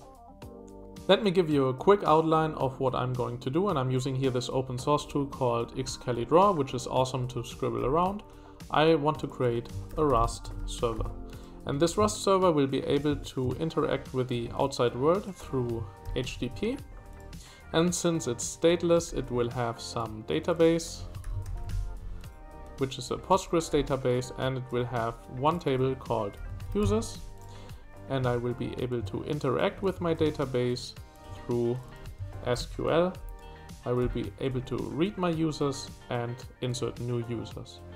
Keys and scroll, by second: 9.6-13.1 typing, 15.8-16.8 typing, 20.7-22.2 typing, 23.7 typing, 26.1-28.2 typing, 32.1-34.0 typing.